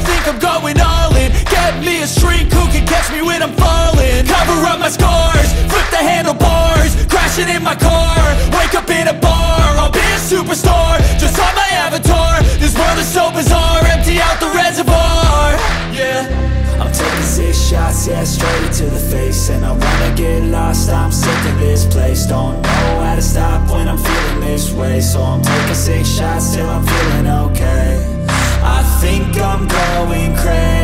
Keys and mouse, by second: 0.0 shift+click, 3.4-5.8 drag, 10.1 alt+click, 11.5-15.9 drag, 17.3 alt+click, 18.5-20.7 drag, 21.3-22.4 drag, 23.7 alt+click, 24.7 alt+click, 25.5 alt+click, 26.4 alt+click, 28.8 click.